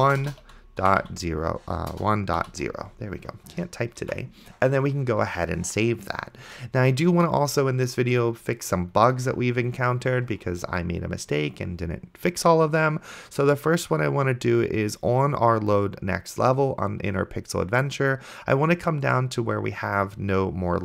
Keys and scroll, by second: 0.0-2.4 typing, 4.4 ctrl+s.